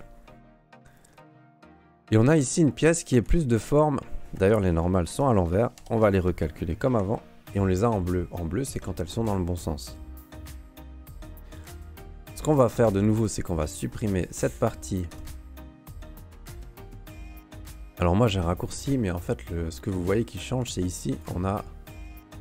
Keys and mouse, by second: 0.7-1.1 middle drag, 1.3 shift+middle click, 1.7 Tab, 2.2 middle click, 3.2 q, 5.1 a, 5.8 ctrl+n, 7.0 Tab, 10.2 right click, 10.5 Tab, 10.9 q, 12.7 ctrl+Tab, 13.8 click, 15.1 Delete, 16.2 click, 17.9 ", 19.3 ", 20.2 ", 20.6 ", 21.1 click.